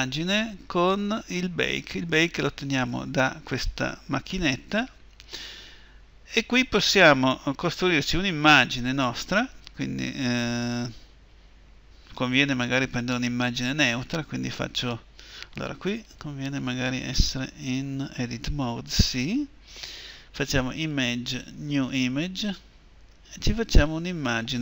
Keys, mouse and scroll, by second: 16.9 Escape, 16.9-18.3 drag.